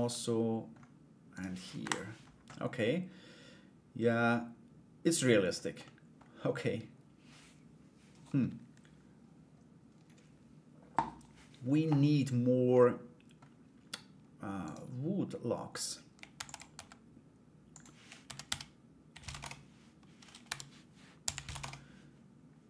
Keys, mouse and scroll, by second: 0.9 right click, 2.1-5.1 middle drag, 5.4 middle click, 12.3 middle click, 14.2 right click, 15.9 shift+d, 16.3 s, 17.8 r, 20.0 r.